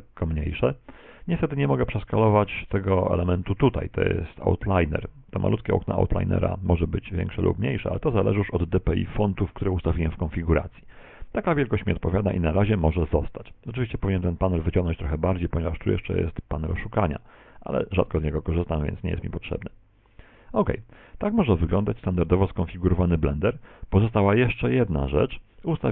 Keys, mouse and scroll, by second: 6.0 click, 14.9 click, 19.5 click.